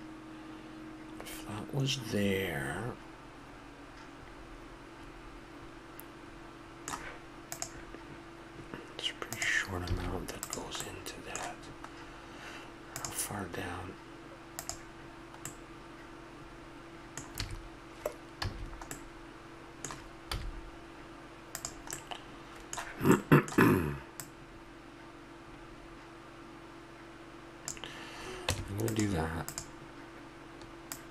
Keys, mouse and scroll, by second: 4.6 middle click, 9.9 a, 10.4 right click, 10.8-12.4 middle drag, 11.2 click, 15.5 middle click, 16.1-17.3 middle drag, 17.3 a, 18.4 a, 18.9 middle click, 20.4 z, 22.0 middle click, 23.4-25.8 middle drag, 25.8 click, 28.5 Tab, 29.5-31.1 drag.